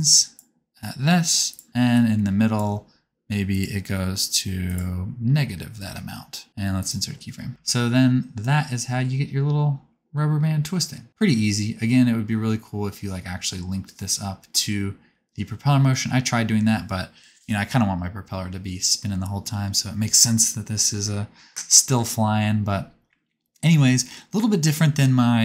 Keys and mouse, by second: 0.1-1.7 drag, 1.9-6.8 drag, 6.8 middle click, 7.5-13.0 drag, 7.5 space, 13.6-16.6 right drag, 16.6-19.6 drag, 21.4 right click, 22.0-25.4 drag.